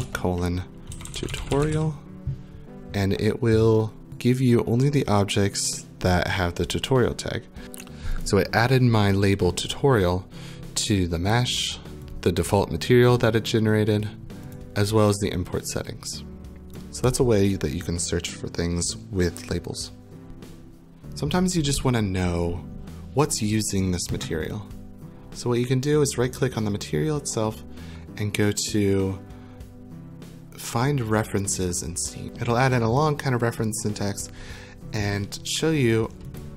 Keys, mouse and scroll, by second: 4.1 typing, 4.1 click, 4.7 click, 6.3 click, 8.2 click, 14.6 click, 16.7 click, 25.2 click, 26.4 right click, 36.4 click.